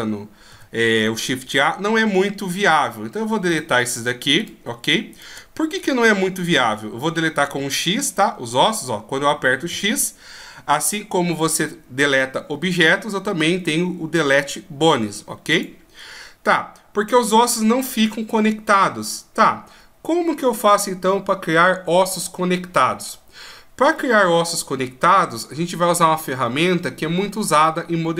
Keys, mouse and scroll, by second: 0.4 n, 3.4 shift+right click, 4.3 shift+right click, 5.0 shift+right click, 7.4 x, 9.6 x, 16.8-20.0 scroll down 1.